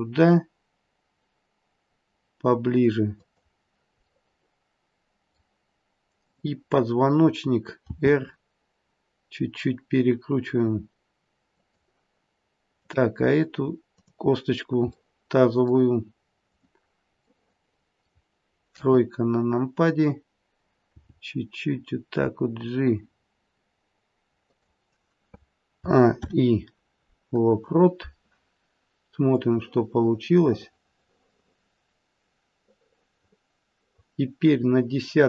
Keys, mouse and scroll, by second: 4.1 middle click, 6.1 click, 7.9 r, 12.7 click, 13.9 click, 15.0 middle click, 16.4 click, 17.2 middle click, 18.7 KP_3, 20.8 g, 25.8 a, 26.1 i, 29.4 click.